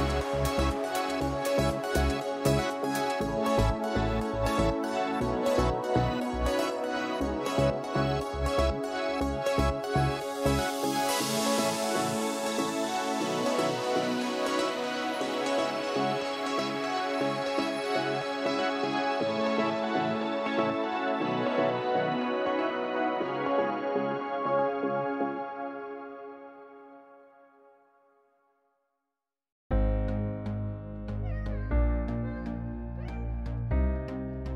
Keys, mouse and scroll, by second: 0.3 click, 1.1 click, 1.2 Delete, 2.3 click, 3.5 click, 4.4 click, 5.0 click, 5.1 click, 5.8 click, 6.4 click, 6.4 click, 7.0 click, 7.4 click, 7.6 Delete, 8.5 click, 9.5 click, 10.6 click, 10.7 Delete, 12.1 click, 12.9 click, 13.0 Delete, 14.9 click, 15.6 click, 17.0 click, 17.3 F1, 19.7 click, 23.7 click, 25.4 BackSpace, 26.2 BackSpace, 30.0 click, 30.9-32.6 typing.